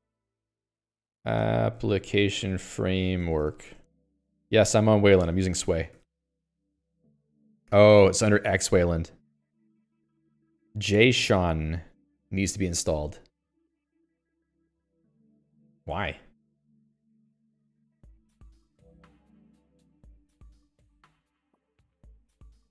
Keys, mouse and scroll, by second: 0.3-4.4 typing, 0.5 Up, 5.9 Escape.